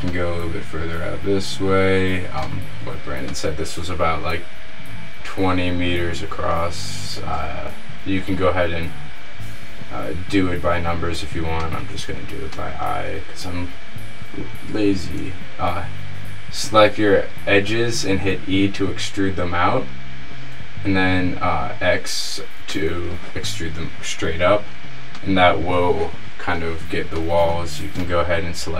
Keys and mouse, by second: 7.5 e, 13.6 middle click, 15.2 e, 23.0-24.4 middle drag, 25.0 middle click, 26.9-28.7 middle drag.